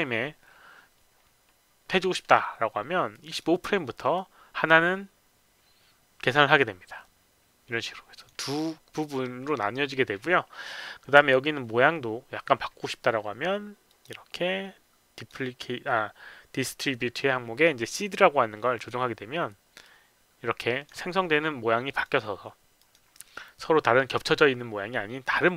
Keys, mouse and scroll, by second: 3.1 click, 3.3 click, 3.5 KP_5, 4.0 click, 8.2 click, 13.9 click, 15.1 click, 18.7 click, 19.8-20.9 drag, 21.9 click, 22.1 click, 22.8 click.